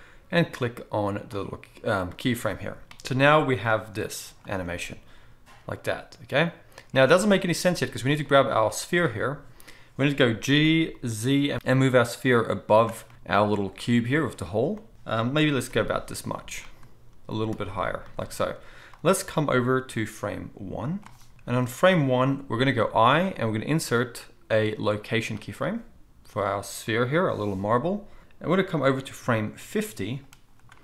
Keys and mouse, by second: 1.4-3.6 middle drag, 3.6-8.2 drag, 4.6 space, 7.1 space, 8.2-16.6 middle drag, 10.5 g, 16.6 click, 16.7-18.9 middle drag, 17.1 g, 18.9-30.8 drag, 22.8 i.